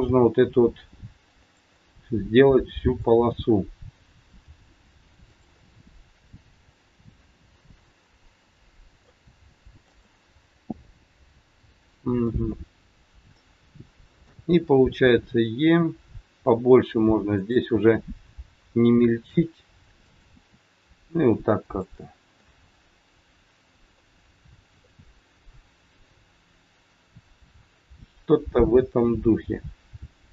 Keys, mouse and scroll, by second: 0.0 g, 1.7 middle click, 4.5 g, 5.6 middle click, 5.6-6.7 scroll up 1, 9.2 g, 10.0 middle click, 12.7 KP_1, 14.1 click, 15.1 e, 17.8 e, 22.4 middle click, 22.4 e, 24.3-24.7 scroll down 4, 24.7 middle click.